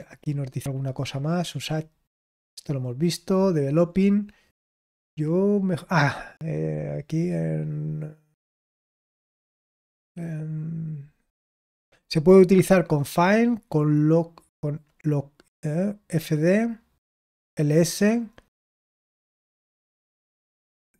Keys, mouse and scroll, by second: 1.2-1.7 scroll down 2, 1.7-3.9 scroll down 1, 3.9-5.7 scroll up 1, 5.7 click, 6.6-7.3 scroll up 1, 7.3-9.6 scroll up 1, 9.6-10.8 scroll up 1, 10.8-20.9 scroll up 1.